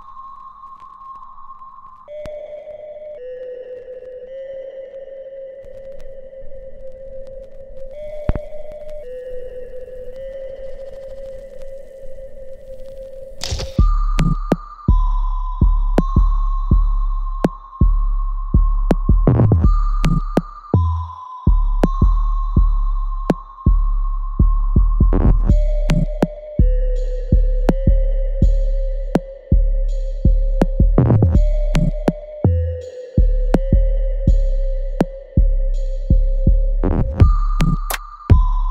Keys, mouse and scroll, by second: 2.0 click, 3.2-3.7 scroll down 1, 3.7 w, 4.6-6.6 drag, 6.6 right click, 7.3 alt+click, 8.2 right click, 9.1 click, 10.2-12.5 alt+drag, 12.5 alt+right click, 13.6 click, 14.0-15.9 alt+drag, 15.9-23.0 ctrl+drag, 23.0 alt+right click, 24.0 click, 24.3-26.4 alt+drag, 26.4 ctrl+s, 27.2 click, 28.9 alt+right click, 29.4 alt+click, 29.8 alt+middle click, 30.3 right click, 31.6 click, 32.8 shift+click, 33.5 alt+click, 33.9 alt+middle click, 35.0 shift+click, 37.0 click.